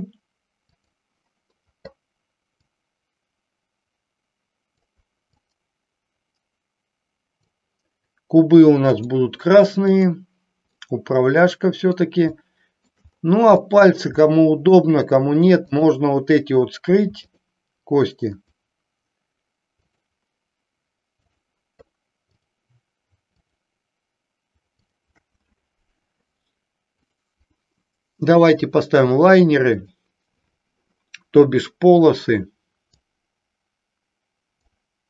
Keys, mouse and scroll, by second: 0.7 click, 2.6-4.7 drag, 5.6-7.3 drag, 8.9 click, 9.9 click, 10.7-12.0 middle drag, 12.4 shift+middle click, 13.7 shift+middle click, 14.4 middle click, 15.7 click, 17.2 shift+click, 18.4-19.4 shift+drag, 21.2-22.2 shift+drag, 22.4 shift+click, 23.3 shift+click, 24.7 shift+click, 26.8-28.8 drag, 33.2-34.7 drag.